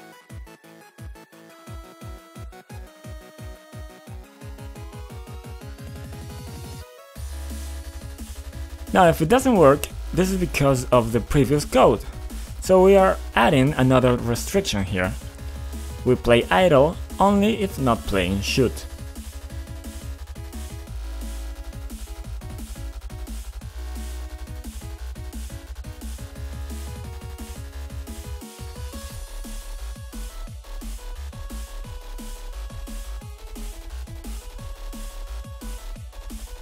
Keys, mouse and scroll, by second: 2.8 F5, 5.1 typing, 6.3 typing, 7.9 click, 8.5 scroll up 2, 9.1 scroll up 1, 9.8 scroll up 1, 12.0 click, 14.5 click, 15.0 click, 15.0 c, 15.9 click, 16.0 click, 16.6 click, 18.9 click, 19.0 click, 20.0-22.0 typing, 22.0 Return, 22.3 Return, 26.6 F5, 30.3-34.1 typing, 34.3 click, 34.8 scroll down 2, 36.4 click.